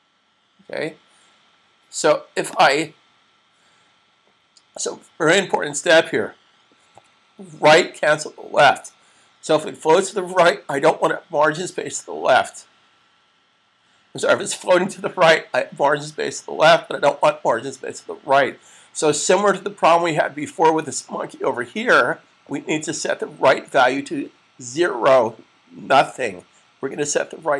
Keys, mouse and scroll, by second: 2.6 click, 23.7 click.